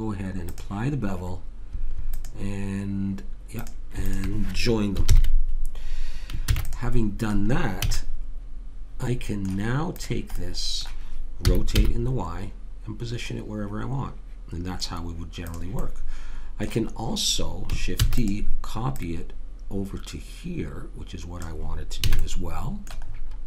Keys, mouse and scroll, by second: 0.5-5.6 drag, 5.0 ctrl+j, 6.5 ctrl+s, 7.0-8.1 middle drag, 7.9 a, 10.0 click, 11.5 r, 15.8 middle click, 16.7 click, 17.9 shift+d, 18.9 click, 22.1 a.